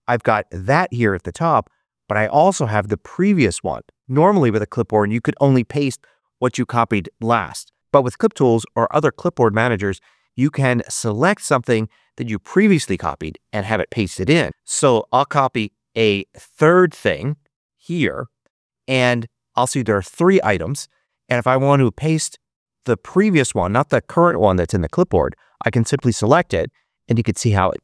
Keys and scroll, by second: 17.7 super+c, 19.0 Return.